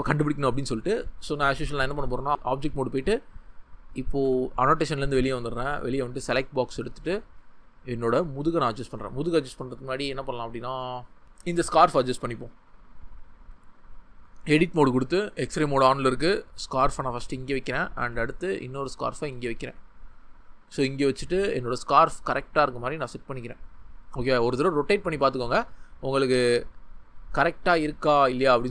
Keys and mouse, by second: 2.1 drag, 2.5 click, 4.2 Tab, 8.8 Tab, 10.1-10.4 drag, 11.2 w, 12.1-13.1 drag, 14.5 click, 15.8 g, 16.9-17.9 drag, 18.0 g, 19.0 click, 20.7 g, 22.9 g, 23.6 click, 24.5 ctrl+middle click.